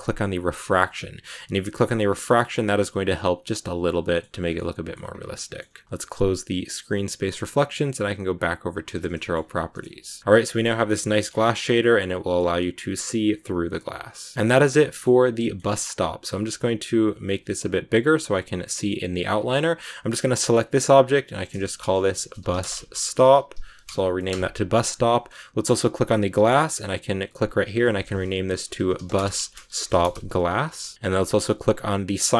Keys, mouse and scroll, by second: 0.4 click, 1.3-4.4 middle drag, 4.4 scroll down 1, 4.4-4.9 scroll up 2, 4.5 middle click, 4.9-5.3 scroll down 2, 5.3-9.0 middle drag, 9.0-9.4 scroll down 3, 9.1 shift+middle click, 9.4-11.2 middle drag, 11.2-11.7 scroll up 5, 11.7 middle click, 12.3-12.8 scroll up 1, 12.8 scroll down 2, 13.0-19.6 middle drag, 19.6 right click, 21.2-24.7 drag, 24.7-25.8 scroll up 1, 25.8 right click, 27.5-30.9 drag, 30.9 s, 31.6 right click.